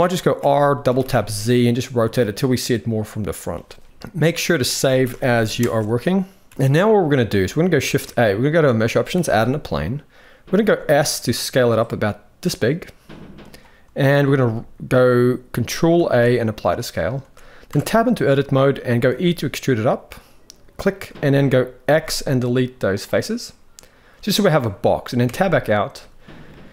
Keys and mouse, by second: 0.1 r, 3.8 ctrl+s, 6.9-7.3 middle drag, 7.6 shift+a, 10.4 s, 15.7 ctrl+a, 17.4 Tab, 18.8 e, 21.6 x, 23.2 middle click, 25.0 Tab, 26.2 middle click.